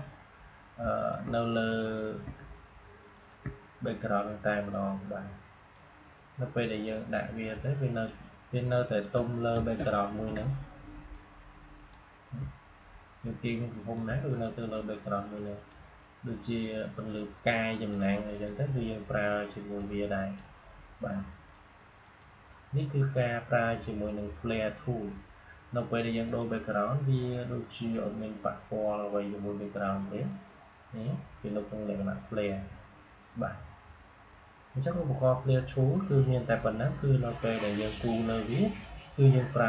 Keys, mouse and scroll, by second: 7.8 shift+click, 10.0 ctrl+g, 11.0-13.3 drag, 13.3-21.9 shift+drag, 26.2-32.8 drag.